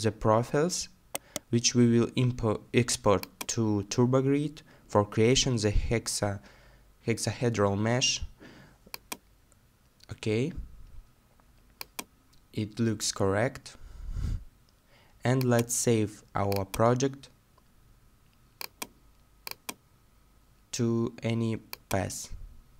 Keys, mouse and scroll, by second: 1.2 right click, 2.1 scroll down 1, 2.2 middle click, 7.3 middle click, 13.7-15.4 scroll down 1.